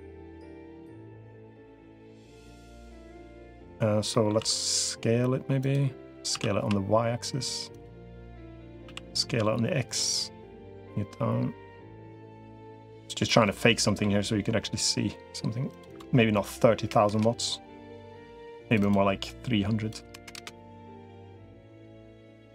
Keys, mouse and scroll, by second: 0.5-1.5 drag, 1.8 middle click, 2.7 middle click, 3.9 middle click, 4.3 s, 6.1 s, 8.1 middle click, 8.7 s, 10.5-13.1 drag, 13.2 middle click, 15.5-17.1 drag, 18.7-20.3 drag, 20.6 middle click, 21.7 click.